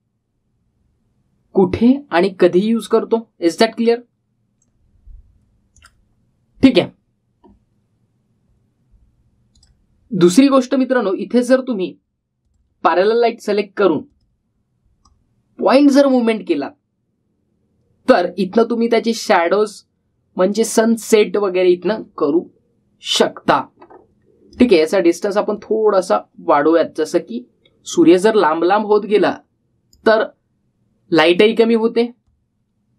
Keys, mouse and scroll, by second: 6.5 click, 10.3 click, 11.5-12.3 scroll up 1, 12.3 scroll down 1, 13.2-25.5 drag, 26.3-30.7 drag.